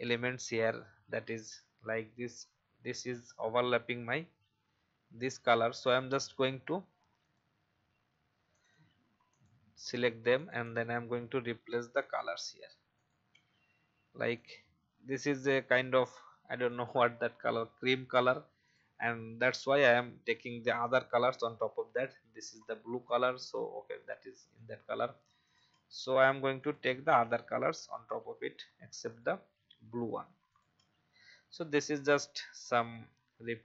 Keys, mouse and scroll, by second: 0.6 click, 5.1 i, 5.8 click, 6.1 v, 7.2-10.3 drag, 8.1 i, 8.7 v, 9.7 i, 10.6 v, 11.7 click, 12.0 i, 13.3 v, 15.4 i, 16.7 click, 17.5 v, 18.6 click, 22.7 i, 24.1 v, 25.2 i, 25.7 v, 26.6-28.6 drag, 26.9-28.6 typing, 29.6 typing, 30.8 v, 32.0 click, 32.7 i.